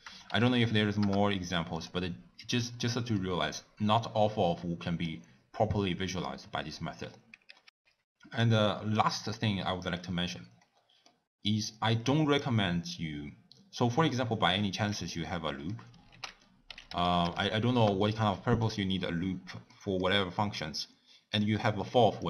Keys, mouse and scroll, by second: 1.2 BackSpace, 7.6 g, 8.4 click, 17.9 o.